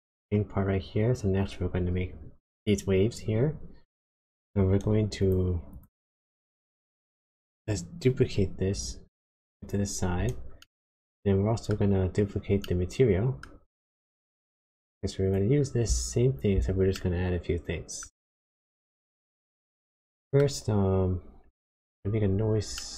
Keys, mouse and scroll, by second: 5.2 click, 5.6 click, 6.9 shift+d, 10.5 middle click, 12.1-12.6 scroll up 3, 12.6 shift+middle click, 15.2 click, 16.9 middle click, 18.6 middle click, 20.0 middle click, 20.6-21.4 scroll up 5, 21.5 shift+middle click, 22.3-22.8 scroll down 3, 22.8 middle click.